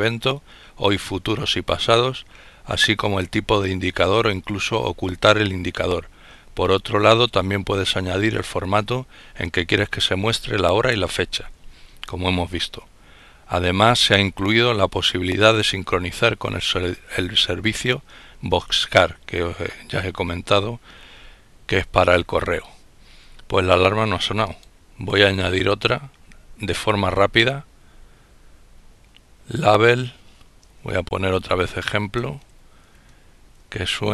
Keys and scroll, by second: 30.1-31.9 typing, 31.9 Tab, 33.3 Down.